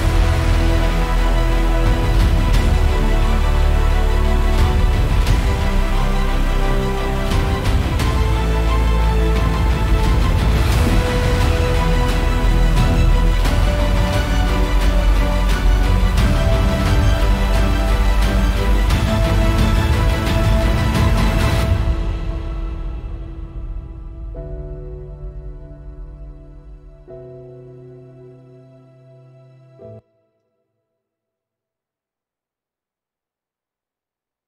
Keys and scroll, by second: 30.2 space, 30.4 Return, 30.5 Return, 31.7 super+=.